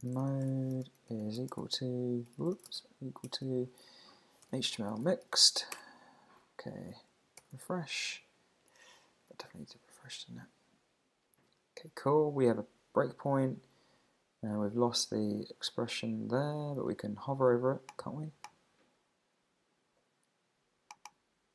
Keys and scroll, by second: 0.5 shift+0, 5.7 Return, 7.4 super+r.